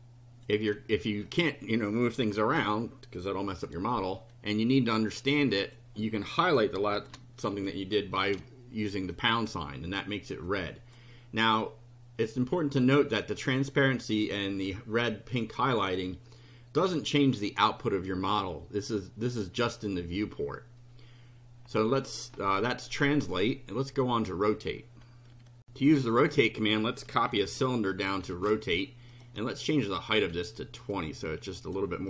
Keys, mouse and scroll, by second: 1.3 click, 2.2 Delete, 2.5 KP_0, 3.4 F5, 5.6 click, 7.0 shift+3, 7.5 shift+F5, 9.1 click, 10.4 click, 27.4 ctrl+c, 27.9 ctrl+click, 28.4 ctrl+v, 29.1 click, 29.7 click, 30.2 2, 30.9 click.